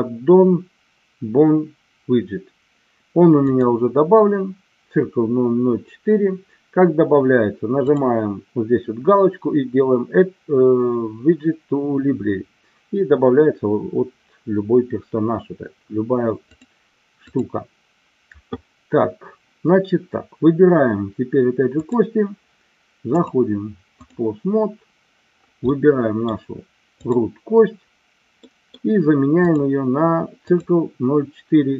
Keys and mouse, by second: 3.5-6.2 drag, 7.9-12.5 drag, 16.5 click, 23.2 click, 25.8-26.4 middle drag, 27.1-27.9 drag, 28.4 middle click, 29.4-30.7 drag.